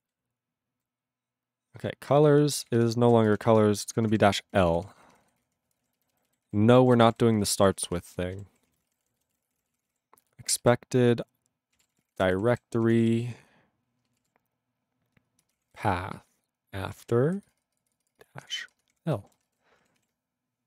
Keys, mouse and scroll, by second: 0.1-0.8 ctrl+n, 2.3 alt+f, 2.5 alt+f, 2.6 alt+f, 2.8 alt+f, 3.4 ctrl+BackSpace, 4.3 shift+l, 4.6 ctrl+f, 4.7 ctrl+f, 5.0 ctrl+f, 5.2 ctrl+f, 5.4 ctrl+f, 5.8 ctrl+space, 5.8 ctrl+e, 6.0 ctrl+b, 6.1 ctrl+b, 6.5 ctrl+w, 6.8 ctrl+a, 7.0 ctrl+space, 7.0 ctrl+e, 7.1 ctrl+g, 7.7 ctrl+s, 7.8 ctrl+a, 7.9 ctrl+space, 7.9 ctrl+e, 8.1 ctrl+g, 8.5 ctrl+s, 8.7 ctrl+a, 8.8 ctrl+n, 8.8 ctrl+space, 8.9 ctrl+e, 8.9 ctrl+n, 9.1 ctrl+e, 9.2 ctrl+n, 9.5 Tab, 9.5 ctrl+e, 9.6 ctrl+p, 9.7 ctrl+e, 9.8 ctrl+p, 9.9 ctrl+e, 9.9 ctrl+p, 10.6 alt+b, 11.8 alt+d, 11.9-13.6 typing, 14.3 alt+d, 15.4-19.0 typing, 17.0 alt+f, 18.5 Delete, 18.7 Delete, 19.4 ctrl+a, 19.4 ctrl+e, 19.5 ctrl+g, 20.1 ctrl+s.